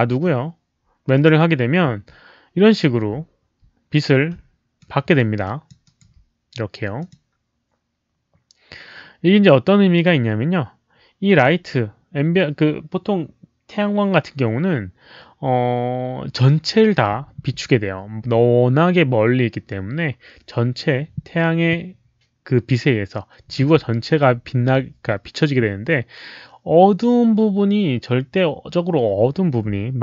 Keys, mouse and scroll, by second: 1.1 click, 4.7 alt+right click, 5.4 alt+click, 5.8 alt+right click, 6.9 click, 10.0-11.4 drag.